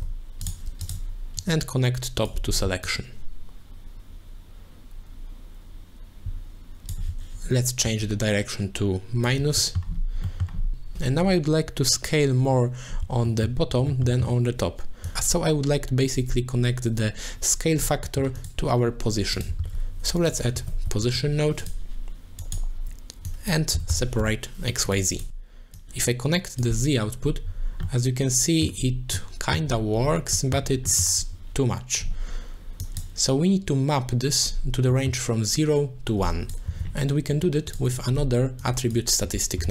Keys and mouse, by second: 1.4 click, 1.6 click, 2.9-6.9 shift+drag, 8.0-9.3 shift+drag, 9.6 middle click, 10.3 middle click, 13.3 shift+middle click, 13.9 shift+middle click, 14.2 shift+middle click, 18.1 middle click, 18.4 click, 19.3 click, 19.6 shift+a, 21.7 shift+a, 23.3-25.0 drag, 25.1 click, 25.7 click, 27.8 middle click, 29.1 middle click, 30.3 middle click, 31.0 shift+middle click, 32.8 click, 35.1 middle click, 36.2 click, 36.8 g, 37.3 g, 37.9 click, 38.6 click, 38.9-39.7 drag.